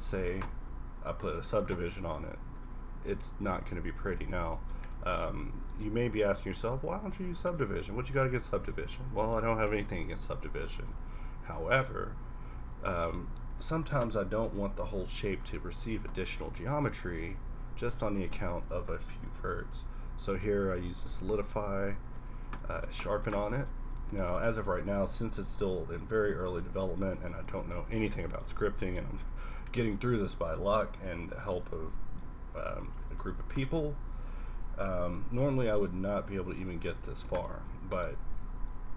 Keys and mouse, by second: 1.2 click, 2.1 ctrl+1, 3.1-3.8 middle drag, 3.8 x, 6.0 z, 6.9 KP_Decimal, 7.4 z, 9.8-10.6 middle drag, 10.8 z, 11.1 z, 11.6 q, 14.9-16.6 middle drag, 20.0-21.6 drag, 22.2-23.2 middle drag, 23.2 a, 24.2-24.6 middle drag, 25.9 KP_Enter, 26.4 KP_Enter, 26.6 KP_Decimal, 26.9 z, 28.0 z, 28.6 q, 30.1-31.6 middle drag, 31.6-34.3 drag, 35.5 click, 37.7 a.